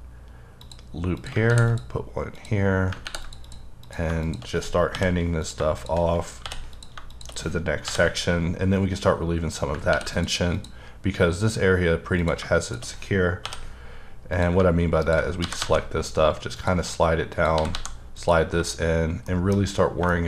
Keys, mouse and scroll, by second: 0.1-0.6 scroll down 1, 0.6 click, 1.3 click, 1.5 ctrl+r, 1.7 click, 3.0 ctrl+r, 3.2 ctrl+click, 4.2 shift+click, 4.9 j, 5.4 click, 6.4 j, 6.7 click, 7.8 j, 9.9 ctrl+r, 10.2 click, 10.5 click, 12.2 click, 12.6 shift+click, 13.4 j, 14.3 click, 15.4 g, 15.6 g, 16.6 click, 17.3 click, 17.5 g, 17.7 g, 18.2 click, 19.3 shift+middle click, 20.1 shift+double middle click.